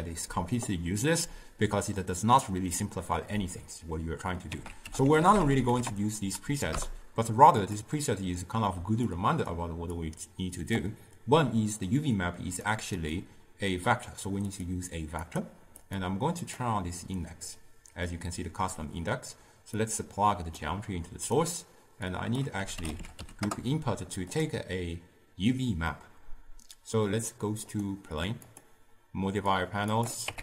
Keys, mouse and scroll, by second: 6.8 ctrl+a, 12.7-20.7 drag, 22.4-27.9 drag, 29.7-30.4 drag.